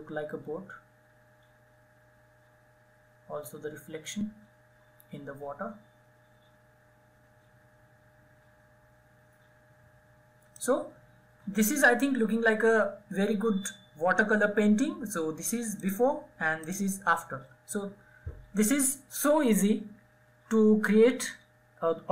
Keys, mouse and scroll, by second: 15.3 click.